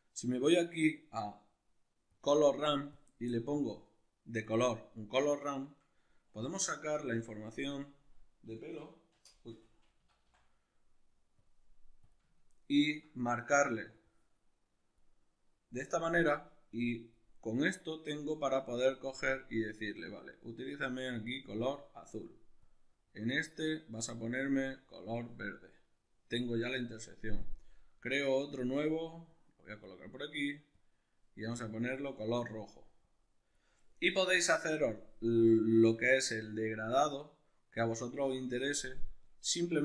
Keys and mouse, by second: 3.0 click, 3.6-5.5 drag, 5.5-12.1 middle drag, 6.9 shift+a, 12.1 click, 12.4-13.9 ctrl+middle drag, 13.9 drag, 16.7-19.4 drag, 22.6-24.1 drag, 28.5-30.8 drag, 33.0-39.8 drag.